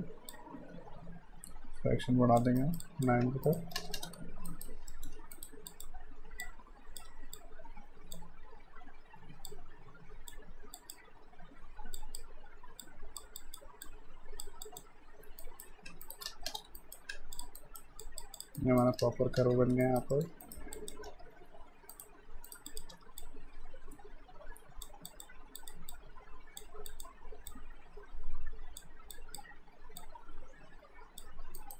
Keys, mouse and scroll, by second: 2.6 alt+right click, 2.8 alt+click, 3.2 q, 3.4 right click, 3.7 space, 4.5 alt+right click, 4.9 alt+middle click, 5.3 right click, 5.7 click, 7.1 w, 7.4 click, 15.4 alt+right click, 15.9 q, 16.1 right click, 16.3 space, 16.8 alt+right click, 17.4 click, 17.6 alt+right click, 18.1 alt+click, 18.6 alt+right click, 19.0 space, 19.8 alt+right click, 20.1 alt+middle click, 20.4 right click, 20.7 click, 21.1 w, 21.9 right click, 22.5 right click, 22.7 click, 22.9 w, 23.2 click, 31.6 alt+right click.